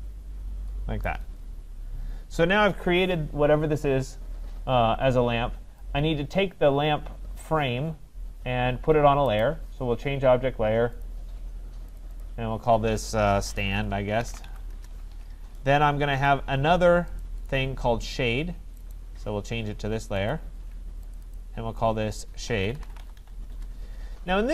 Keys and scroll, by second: 14.7 Return, 23.5 Return.